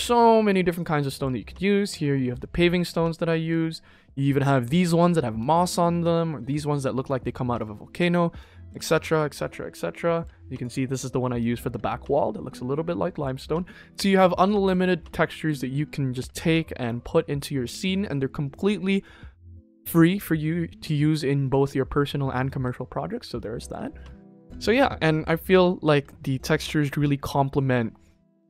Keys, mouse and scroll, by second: 18.4 click.